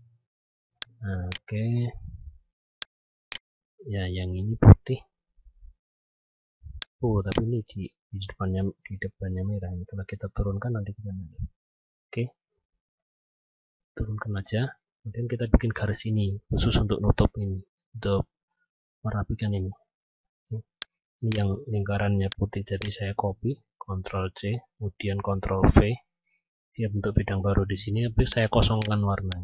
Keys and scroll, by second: 9.5 ctrl+Page_Down, 23.2 ctrl+c.